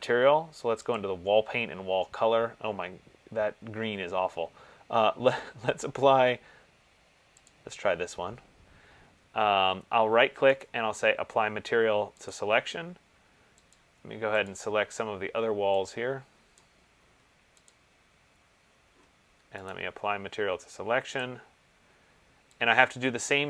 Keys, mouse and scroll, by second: 1.2 click, 6.4 middle click, 6.5 middle click, 7.8 click, 11.0 right click, 12.6 click, 13.9 click, 16.8 click, 17.9 shift+click, 20.0 right click, 21.4 click.